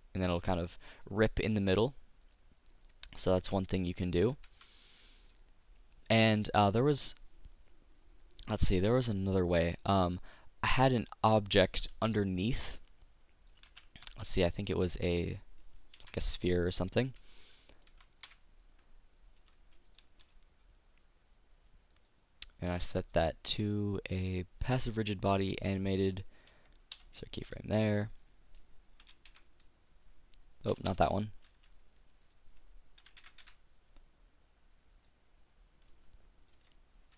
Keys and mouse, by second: 0.1 click, 0.7-1.9 middle drag, 2.5-3.5 middle drag, 4.5 ctrl+z, 8.5-11.3 middle drag, 15.4 shift+a, 16.1 KP_1, 17.9 z, 18.3 KP_5, 19.5 s, 20.3 g, 22.1 click, 22.9 click, 27.1 i, 31.0 BackSpace, 35.2 click, 36.8 i.